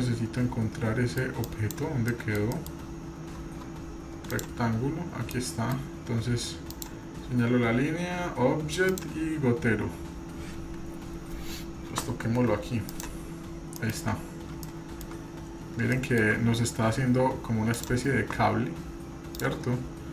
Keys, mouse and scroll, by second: 1.5-1.8 drag, 2.1-2.4 middle drag, 2.6 middle click, 3.0-4.3 scroll down 2, 4.3 click, 4.3 scroll down 4, 5.0 scroll up 2, 5.3 middle click, 6.7 click, 8.9 click, 13.8 middle drag, 14.1-14.7 scroll up 3, 14.7-15.1 shift+middle drag, 15.2 scroll up 2, 15.9-16.3 shift+middle drag, 16.4 scroll up 2, 17.1-17.7 scroll up 1, 17.7 drag, 17.7 scroll down 1, 18.4-19.2 scroll up 1, 19.3 click.